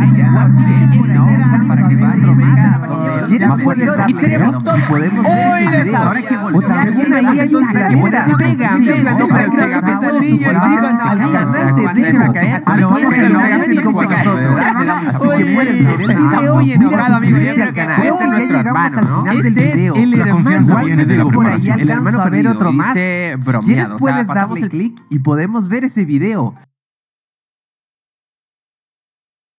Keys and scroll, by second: 18.6 space, 26.6 space.